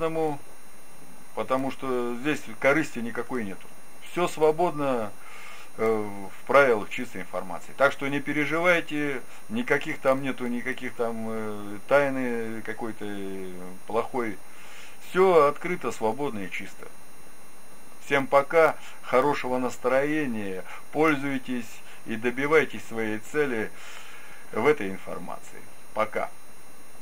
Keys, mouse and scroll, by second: 3.3-14.8 middle drag.